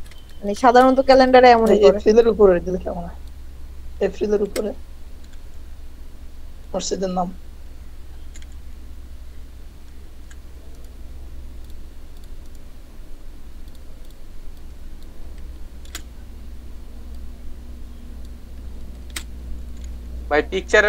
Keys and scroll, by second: 1.2 space, 4.5 ctrl+g, 5.3 Down, 8.5 Up, 15.9 ctrl+KP_2, 19.1 ctrl+g, 19.8 Down.